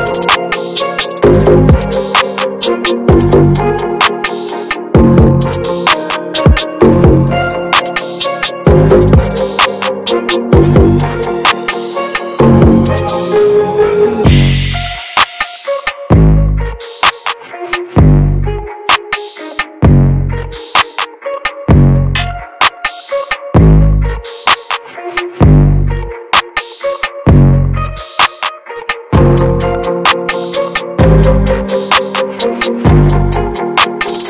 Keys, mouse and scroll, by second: 0.4-2.3 drag, 2.3 ctrl+z, 2.6-5.0 middle drag, 5.0-6.7 drag, 6.7-8.8 middle drag, 8.8 ctrl+z, 10.2-11.1 scroll down 1, 11.1-14.2 drag, 14.6-18.2 shift+drag, 18.6-20.3 shift+drag, 20.3 ctrl+z, 20.6-22.0 drag, 22.0 middle click, 22.9 ctrl+z, 23.4 shift+f, 24.9-27.3 drag, 27.3 middle click, 27.5-27.8 scroll up 2, 27.8 middle click, 28.2 ctrl+z, 28.4 scroll down 2, 28.6 shift+middle click, 29.0-31.6 drag, 31.6 scroll up 1, 32.0-33.1 middle drag, 33.1 scroll down 2, 33.3-34.2 middle drag.